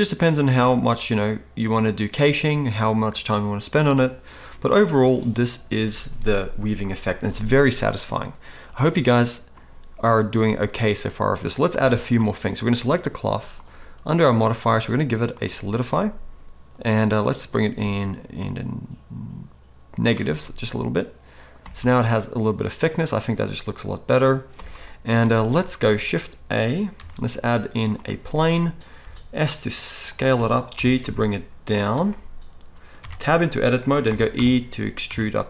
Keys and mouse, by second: 11.7 space, 12.1-13.6 middle drag, 13.6 click, 13.7 middle click, 14.3-30.1 drag, 21.6 space, 24.5 space, 27.0 shift+a, 29.0 s, 30.1-35.4 middle drag, 30.7 g, 33.0 Tab, 34.0 e.